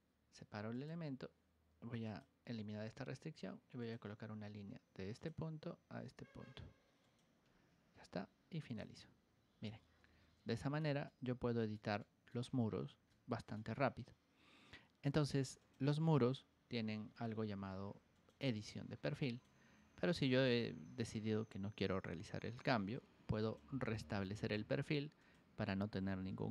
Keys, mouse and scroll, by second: 0.7 click, 2.0 click, 3.7 click, 5.1 click, 6.9 click, 8.6 click, 9.5 scroll down 2, 9.6 middle click, 10.0 Escape, 10.5 middle click, 11.0 shift+middle click, 11.9 middle click, 12.5 scroll down 1, 13.0 shift+middle click, 15.5 click, 17.7 ctrl+1, 19.8 Escape, 22.2 middle click, 22.8 ctrl+1, 23.3 ctrl+click, 23.9 ctrl+click, 24.5 Escape, 25.1 click.